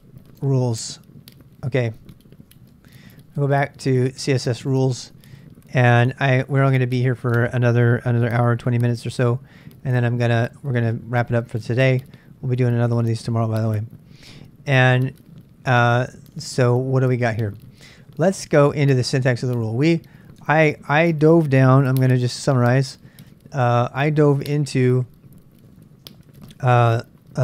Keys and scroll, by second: 0.2-4.3 typing, 8.7 ctrl+[, 8.8 ctrl+j, 10.3 ctrl+[, 10.7 z, 10.9 z, 19.6 super+Tab, 20.4 super+Tab, 21.8 ctrl+a, 22.4 ctrl+a, 24.7-27.4 typing, 27.1 ctrl+a.